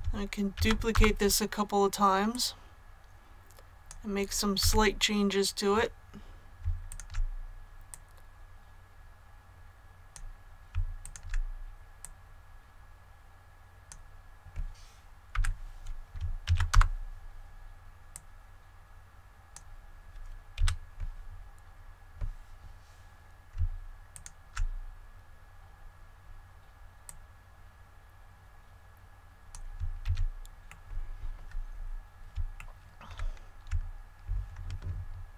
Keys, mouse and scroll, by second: 0.5 shift+d, 0.8 Return, 2.2-4.0 drag, 4.5 a, 6.8 alt+right click, 7.8-10.1 drag, 10.9 alt+right click, 11.9-14.0 drag, 15.2 |, 16.4 shift+d, 16.6 Return, 18.0-20.0 drag, 20.5 a, 24.0 alt+right click, 27.0-29.7 drag, 29.9 ctrl+z, 30.6 middle click, 31.2-31.6 scroll up 1, 32.5 shift+middle click.